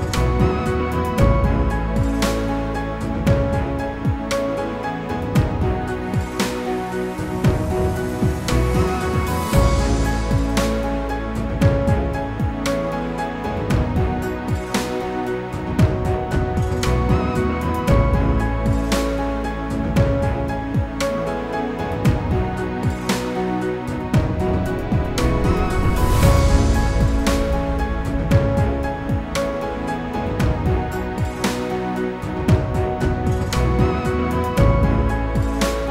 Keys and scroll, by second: 12.9 ctrl+c, 13.5 ctrl+f, 21.8 ctrl+c, 22.4 ctrl+f.